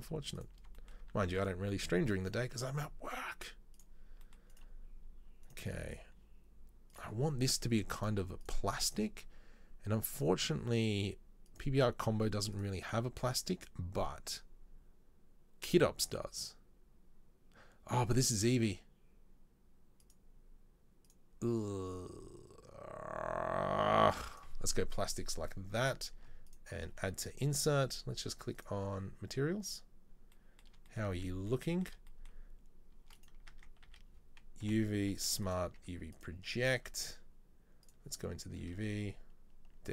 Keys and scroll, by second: 1.2 z, 33.5 Tab, 34.0 a, 34.8 u.